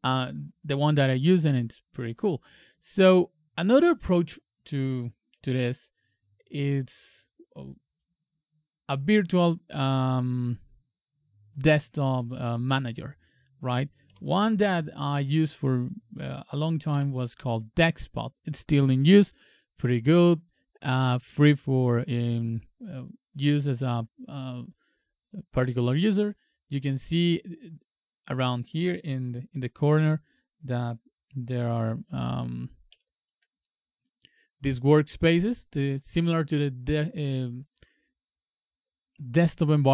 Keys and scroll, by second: 5.5 super+Tab.